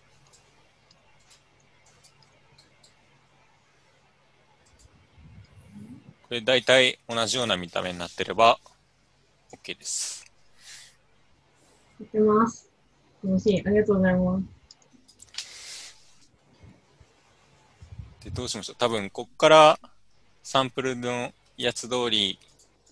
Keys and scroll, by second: 22.7 u.